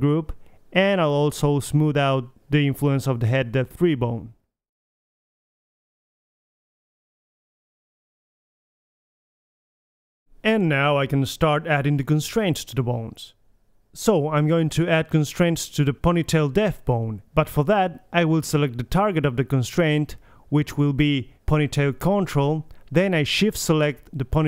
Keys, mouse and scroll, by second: 0.6-1.7 drag, 2.1-3.2 drag, 3.6 click, 5.4 click, 5.6 r, 5.9 r, 7.0 r, 7.1 middle click, 7.6 middle drag, 8.4 KP_3, 9.2 r, 9.9 click, 9.9 right click, 10.4 KP_3, 15.6 g.